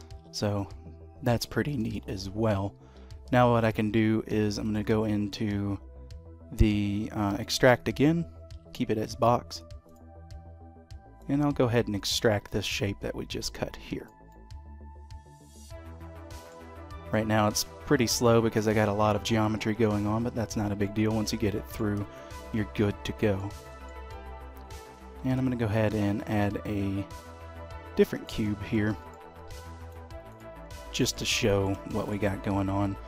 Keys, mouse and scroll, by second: 0.2 h, 0.6 middle click, 1.9 shift+middle click, 3.2 d, 9.8 click, 11.1 click, 14.8 middle click, 20.8 middle click, 21.8-22.2 scroll down 3, 22.2 shift+middle click, 22.5 middle click, 23.6 shift+middle click, 24.1 middle click, 24.7-25.0 scroll down 3, 25.2 shift+a, 28.5-28.9 scroll up 2, 28.9 shift+middle click, 29.3 g, 30.6-31.3 scroll up 3, 30.9 shift+middle click, 31.3 middle click, 31.9 shift+middle click, 32.6-33.0 scroll down 2.